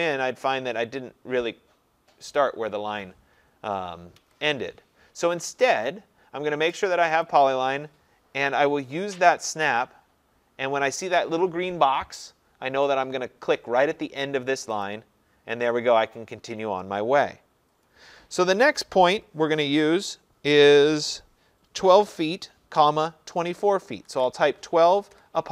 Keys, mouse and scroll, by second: 0.5-2.5 scroll, 4.2 Escape, 7.3 click, 8.7 click, 13.7 click, 14.9-20.0 drag, 23.8-25.1 typing.